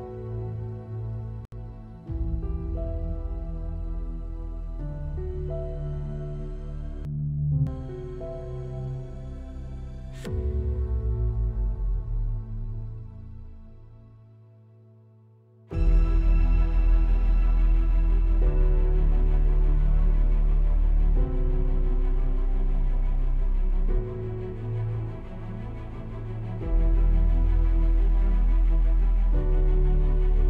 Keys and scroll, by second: 27.7 super+=.